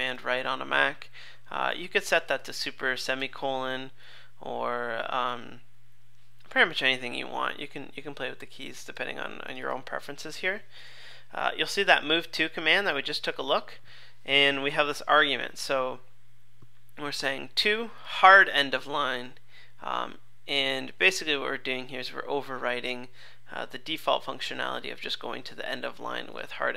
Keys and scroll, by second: 0.2 super+Right, 4.0 super+z.